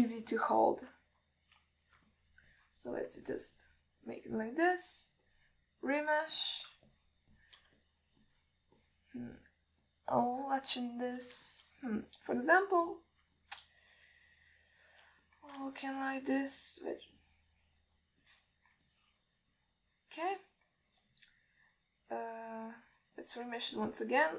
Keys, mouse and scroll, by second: 0.5 middle click, 1.0 alt+shift+middle click, 1.5 ctrl+z, 3.4 middle click, 3.8 click, 4.5 middle click, 4.9 click, 5.4 click, 5.8 alt+middle click, 6.5-7.4 drag, 7.6 middle click, 8.2 shift+click, 8.6 shift+click, 9.1 alt+middle click, 9.5 click, 10.0 click, 10.5 click, 11.1 click, 11.7 middle click, 12.8 alt+shift+middle click, 13.1 alt+middle click, 13.5 click, 14.1 click, 14.7-16.2 alt+middle drag, 16.5 ctrl+alt+middle click, 17.0 alt+shift+middle click, 17.9 alt+middle click, 18.5 click, 19.5 middle click, 20.1 ctrl+alt+middle click, 20.8 middle click, 21.7 ctrl+alt+middle click, 23.6-24.3 drag.